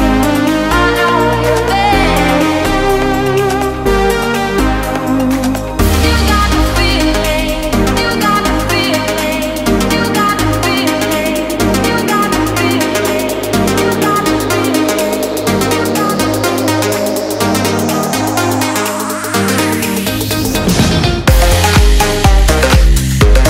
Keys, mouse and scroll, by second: 2.6 alt+Tab, 4.2 alt+click, 7.0 Return, 10.0 Delete, 10.5 click, 11.7 s, 12.3 click, 15.5 s, 16.1 click, 18.1 click, 18.9 Delete, 19.2 click, 20.2 s, 20.8 click.